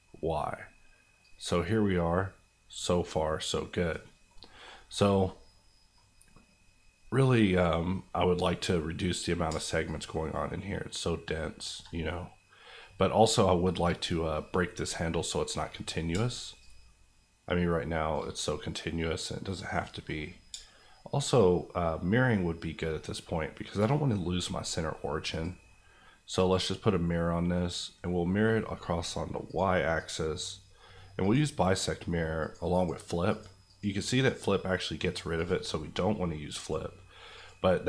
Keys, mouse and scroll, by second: 0.0 middle click, 1.2 click, 4.2 middle click, 7.3-9.5 scroll up 1, 9.5-9.8 shift+scroll up 1, 9.8-11.7 shift+drag, 12.0-15.7 middle drag, 16.6 shift+click, 18.4-20.3 middle drag, 21.3-23.9 shift+drag.